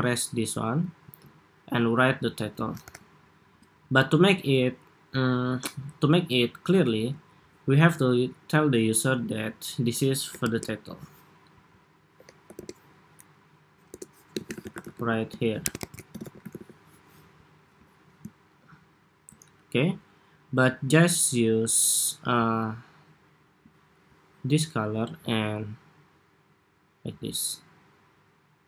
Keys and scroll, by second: 0.7 super+s, 2.5 super+=, 6.6 super+d, 17.4 Escape.